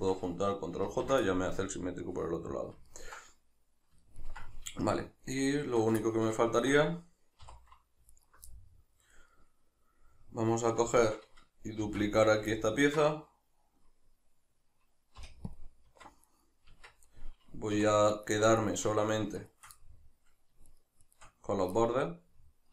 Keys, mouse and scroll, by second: 0.8 ctrl+j, 1.2-5.3 middle drag, 5.3 right click, 5.6 Tab, 6.0-8.1 shift+middle drag, 7.4 3, 8.1 alt+right click, 8.5-12.3 middle drag, 11.8 shift+d, 12.3 right click, 12.6-16.2 ctrl+middle drag, 15.2 p, 16.2 right click, 16.7 Tab, 17.8 3, 18.2 right click, 18.6 shift+right click, 19.4 shift+right click, 19.8-20.7 middle drag, 20.7-21.2 shift+right drag, 21.8-22.7 middle drag.